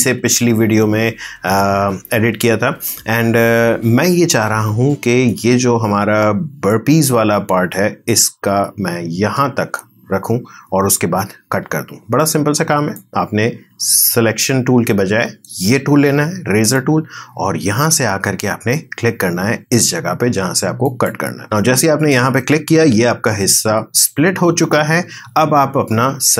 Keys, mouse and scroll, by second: 1.6 space, 4.5 space, 5.3-6.9 drag, 6.9 space, 9.2 space, 12.9 click, 20.8 click, 26.3 click.